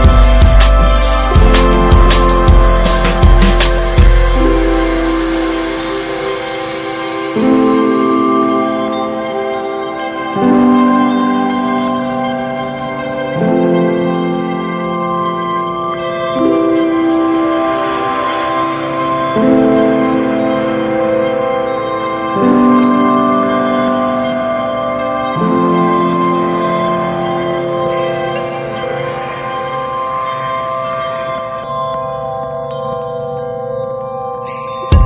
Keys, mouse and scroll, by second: 1.4 scroll down 1, 1.6-2.0 middle drag, 2.0 scroll up 1, 2.3 middle click, 2.6 ctrl+s, 2.8-4.5 middle drag, 4.5 click, 4.8 shift+middle click, 5.2 click, 6.0 g, 7.4 click, 15.5 click, 16.5-18.2 ctrl+shift+drag, 19.2-26.3 drag, 26.3-26.9 scroll up 4, 26.4 middle drag, 26.9-30.7 drag, 30.7 scroll down 4, 30.9-32.0 middle drag, 32.0-32.4 ctrl+shift+right drag, 32.4 ctrl+shift+drag, 32.5 middle click, 32.6 scroll up 3, 33.0-33.5 scroll down 3, 33.5-35.0 drag.